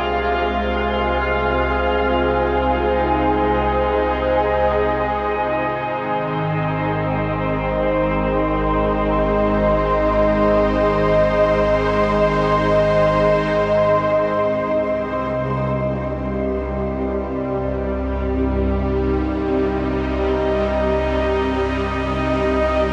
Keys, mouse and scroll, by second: 0.1 z, 0.5 click, 0.7 z, 0.9 click, 1.1 z, 1.3 click, 1.5 space, 1.6 click, 5.6 shift+Right, 6.3-7.8 typing, 7.3 click, 7.6 click, 8.6 click, 10.3 right click, 11.2 click, 11.2 click, 11.6 right click, 12.4 click, 16.8-17.4 scroll down 1, 17.5 z, 17.6 click, 17.7 space, 17.8 click, 17.9 z, 18.1 click, 18.5 z, 18.6 click, 20.3 typing, 20.3 click, 22.7-22.9 typing.